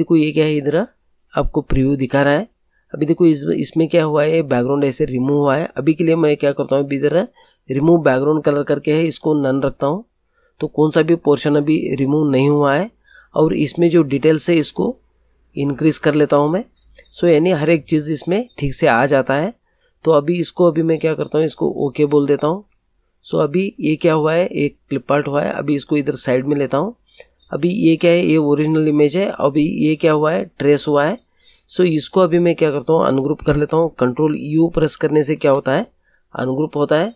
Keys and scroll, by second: 35.3 ctrl+u.